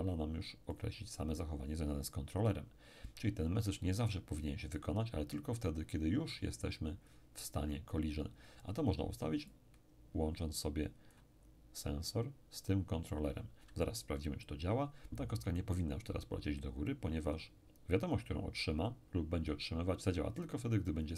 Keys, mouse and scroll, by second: 0.7 click, 9.5-12.1 drag.